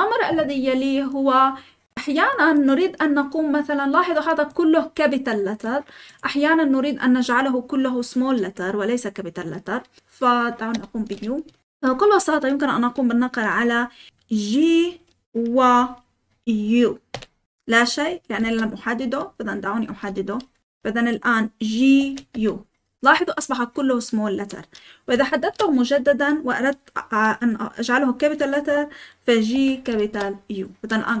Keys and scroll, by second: 10.7 typing, 15.6 typing, 17.1 typing, 18.4-20.6 typing, 19.8 Escape, 21.7-22.4 typing, 25.4 shift+v, 29.2-30.4 typing.